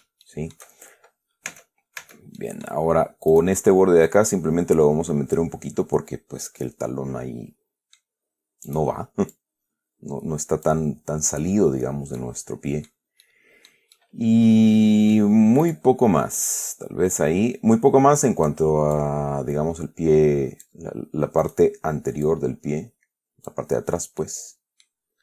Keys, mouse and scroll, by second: 0.5 shift+middle click, 1.8 Tab, 2.7 click, 3.6 right click, 4.4-5.8 drag, 6.5 scroll down 1, 6.9-8.5 middle drag, 9.0 right click, 9.6-11.1 drag, 11.5 scroll up 1, 12.0 scroll down 2, 12.5 middle click, 13.5 middle click, 15.9 right click, 16.8-19.0 drag, 19.2-21.1 drag, 21.7 right click, 22.5-23.9 drag, 23.9-24.5 scroll down 1, 24.5 middle click.